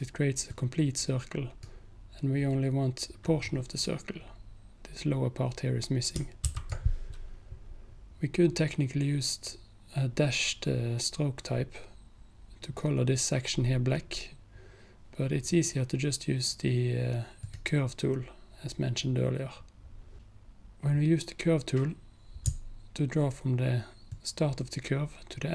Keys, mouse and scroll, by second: 6.5 ctrl+z, 17.5 click, 24.2-25.5 alt+drag.